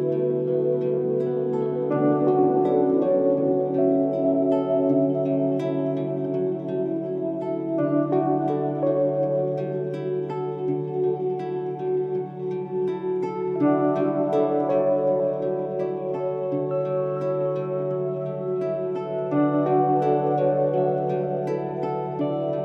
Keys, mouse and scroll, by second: 2.3 Tab, 4.8-5.6 scroll up 11, 6.2 click, 7.1-8.6 drag, 9.6 s, 13.5-14.5 middle drag, 14.5-15.1 scroll up 4, 15.1-16.8 shift+middle drag, 17.9 scroll down 2, 18.8-20.5 middle drag.